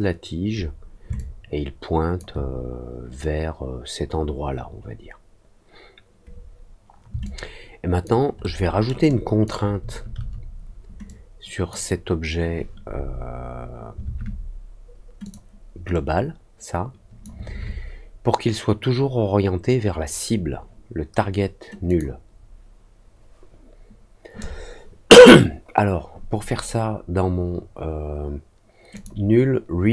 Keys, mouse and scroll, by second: 1.1-2.1 alt+drag, 7.2 alt+click, 8.3 alt+middle click, 9.0 alt+click, 11.0 click, 15.2 click, 15.9-17.2 drag, 21.8 click, 28.9 click.